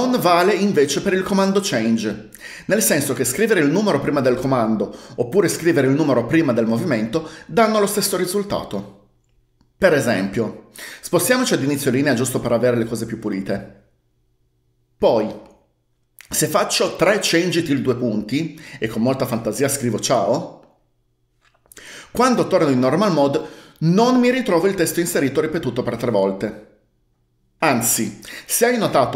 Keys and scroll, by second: 17.3-18.3 typing, 20.1-20.5 typing, 23.2 Escape.